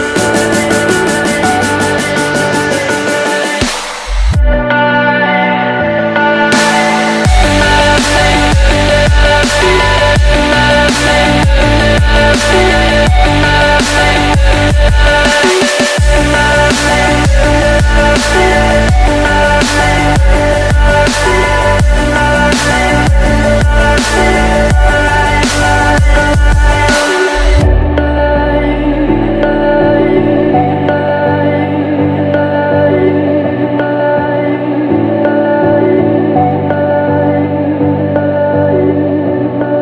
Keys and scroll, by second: 1.6 ctrl+j, 24.5 BackSpace, 29.9 shift+=, 31.0 0, 31.6 BackSpace, 31.8 BackSpace, 36.5 shift+0, 37.1 BackSpace, 37.3 0, 39.1-39.8 typing.